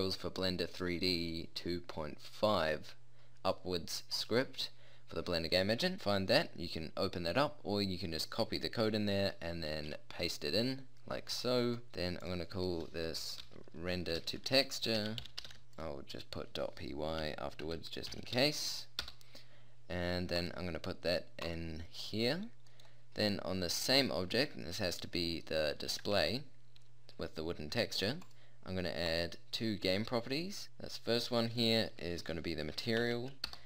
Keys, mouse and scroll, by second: 24.5-25.0 middle drag, 26.2 alt+z.